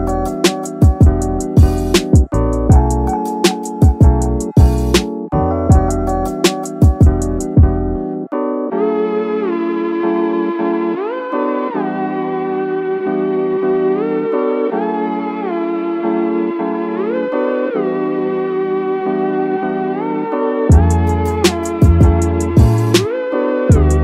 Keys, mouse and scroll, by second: 0.2-1.4 drag, 1.7-2.0 scroll up 2, 2.0 shift+middle click, 3.4 click, 4.3-4.8 middle drag, 5.1-5.4 middle drag, 5.5-5.8 scroll down 2, 5.6 middle click, 5.8 middle click, 6.6 click, 7.1 scroll up 1, 7.2 middle click, 7.5 scroll down 2, 7.6 scroll up 1, 7.7 scroll down 1, 7.8 scroll up 1, 7.9 middle click, 8.4 shift+middle drag, 8.8 middle click, 11.6 click, 12.0 scroll up 1, 12.0 middle drag, 12.5-12.8 shift+middle drag, 13.0-13.5 middle drag, 13.9 middle drag, 14.3 scroll down 1, 14.6-15.4 middle drag, 15.7 scroll down 1, 16.0-16.4 shift+middle drag, 16.7-17.2 middle drag, 17.4 scroll up 1, 17.7-18.0 shift+middle drag, 18.9 scroll up 1, 18.9 middle drag, 21.4-24.0 shift+middle drag, 21.8-22.2 scroll up 1.